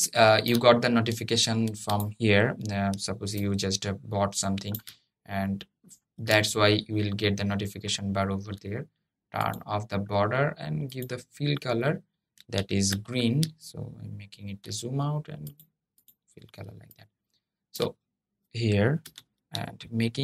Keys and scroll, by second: 12.6 Escape.